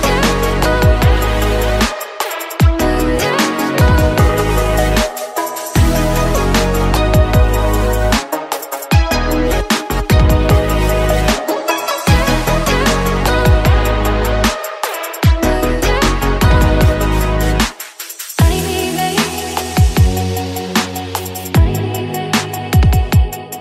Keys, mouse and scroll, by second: 0.1 middle click, 0.9 scroll up 2, 1.1 click, 1.5 Tab, 2.3 click, 2.7-3.9 middle drag, 3.9-5.5 drag, 6.0-7.5 drag, 7.9 click, 8.7 click, 9.3 click, 11.2 Tab, 11.5 click, 11.9 middle click, 12.6 Tab, 13.0 shift+middle click, 13.7 click, 14.5 shift+click, 15.0 middle click, 15.7 click, 17.5 click, 18.0 shift+click, 18.8 click, 20.5-22.3 middle drag, 22.3 ctrl+r.